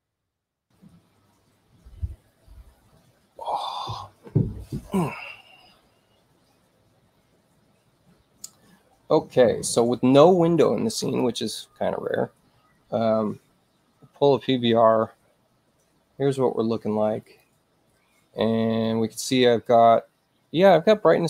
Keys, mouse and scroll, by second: 11.0 click, 17.2 click.